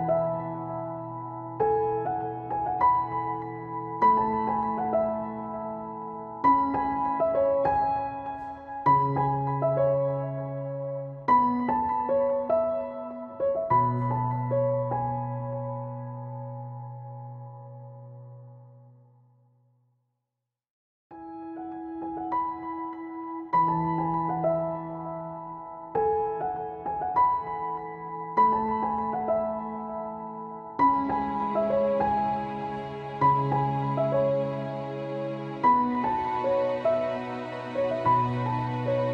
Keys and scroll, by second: 0.3 ctrl+s, 1.9 ctrl+Right, 2.2 ctrl+k, 2.4 ctrl+a, 2.6 Return, 3.7 Return, 4.9 ctrl+z, 5.5 ctrl+z, 6.7 ctrl+z, 10.6 ctrl+z, 11.4 ctrl+z, 19.6 ctrl+z, 21.1 alt+/, 22.2 ctrl+z, 22.5 alt+/, 23.0 ctrl+z, 23.9 alt+/, 26.1 ctrl+s, 27.7 alt+/, 30.3 ctrl+z, 31.7 ctrl+s, 32.3 alt+/, 32.4 ctrl+s, 32.9 ctrl+z, 34.3 Return, 34.7 ctrl+s, 35.8 ctrl+s.